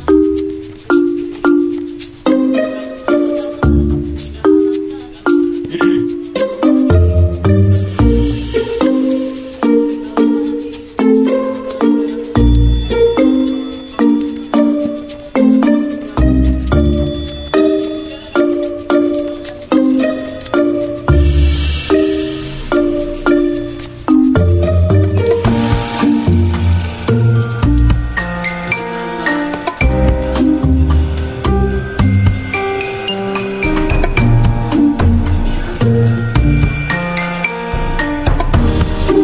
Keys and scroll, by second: 17.4 v, 19.1 ctrl+z, 22.0 i, 25.2-25.9 typing, 31.1 ctrl+g, 31.8 Escape, 35.0 ctrl+z.